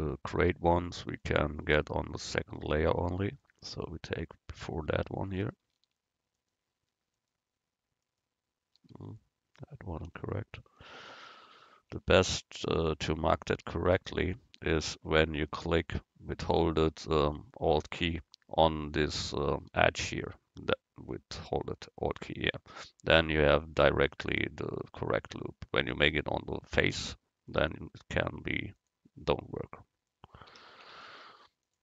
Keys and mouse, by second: 4.3 right click, 4.9 Tab, 10.7 ctrl+y, 12.0 ctrl+y, 15.3 middle click, 15.7 right click, 17.4 middle click, 20.1-26.9 right drag, 27.7-30.7 drag.